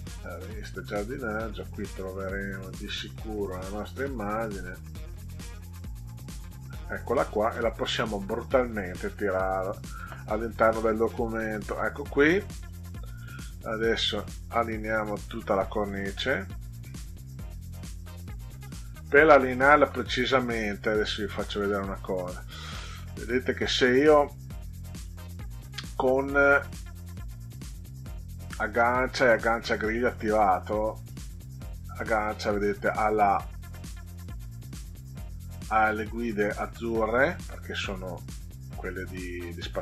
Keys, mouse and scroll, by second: 0.2 click, 0.5 click, 2.4 right click, 5.0 click, 6.3 click, 7.8 click, 8.9 click, 11.8 middle click, 12.6 click, 13.3-16.2 drag, 21.0 ctrl+scroll up 2, 22.7 middle click, 23.6 click, 25.0 click, 26.4 click, 30.0 click, 31.0-33.1 drag, 36.3 click, 37.3-39.1 drag.